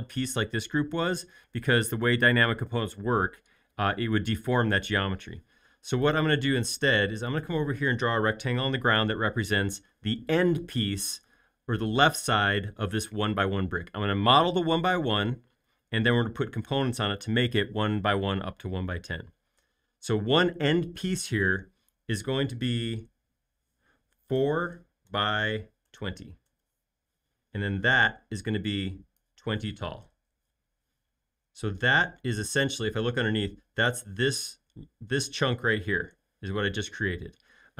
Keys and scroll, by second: 6.9 r, 24.5-26.4 typing, 27.8 p, 29.6-31.2 typing.